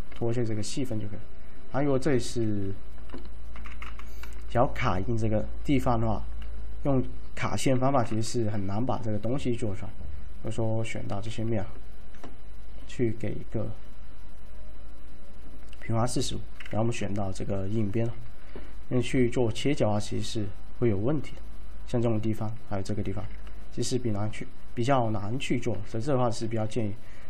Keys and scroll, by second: 2.2 z, 2.4 z, 3.6 F3, 3.8 F3, 3.9 F4, 7.8-8.2 typing, 11.2 ctrl+a, 16.9 2, 19.0 alt+e, 25.8 z, 26.6 z.